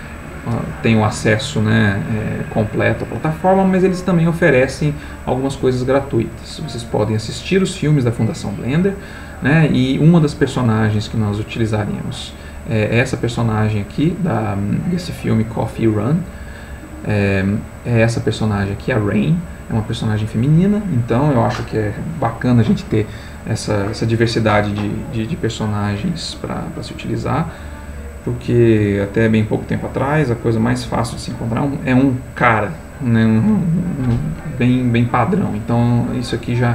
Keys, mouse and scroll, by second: 7.3-9.7 drag, 16.8 click, 17.9 click.